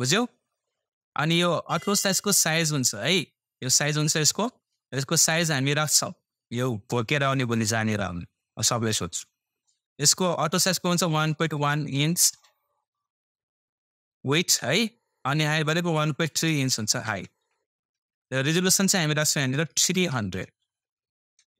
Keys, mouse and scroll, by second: 14.5-15.2 typing.